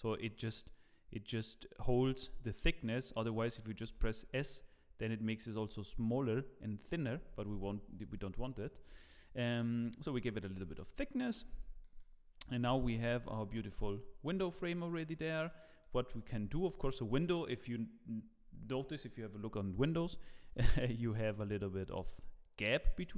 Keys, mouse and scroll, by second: 0.4 middle click, 3.8 s, 8.1 middle click, 8.6 shift+middle click, 9.0 middle click, 10.3 shift+middle click, 10.7 middle click, 11.4 Tab, 11.5-12.0 scroll down 3, 11.8 middle click, 12.6 KP_0, 13.5 z, 14.0 scroll up 3, 14.3 click, 15.0 click, 15.4 middle click, 16.1 scroll up 4, 16.5 shift+middle click, 22.9 click.